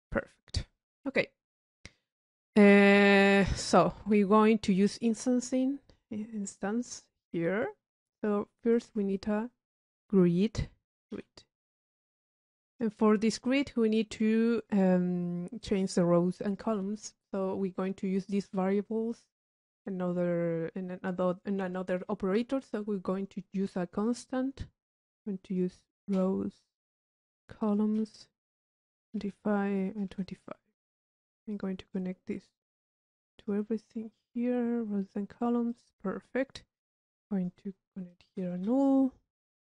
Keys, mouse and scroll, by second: 0.2 click, 1.2 middle click, 1.5 click, 2.7 click, 3.5 middle click, 3.9-4.4 drag, 4.9 click, 5.8 click, 8.1 click, 8.5 middle click, 8.7 click, 9.0 Tab, 9.0 middle click, 9.4 click, 12.1 click, 13.1 middle click, 13.4 drag, 16.5 click, 17.3 Tab, 17.7 middle click, 17.7 click, 23.7-24.6 drag, 25.2-25.6 drag, 27.1-28.1 drag, 28.5-28.9 drag, 29.8 click, 30.7 click, 31.5 click, 32.0 click, 34.2 click, 35.7 click, 36.5 click, 38.3 u, 39.5 click.